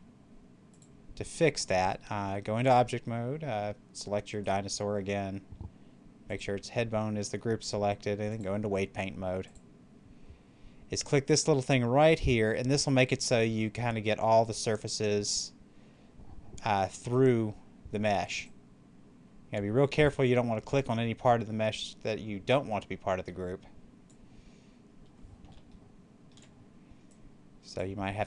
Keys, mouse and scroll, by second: 0.6 click, 2.7 click, 4.2 right click, 6.2 click, 9.5 click, 14.3 click, 18.3-24.6 drag, 24.6 scroll up 1, 25.6-27.0 shift+middle drag, 27.0 click, 28.1-28.2 middle drag.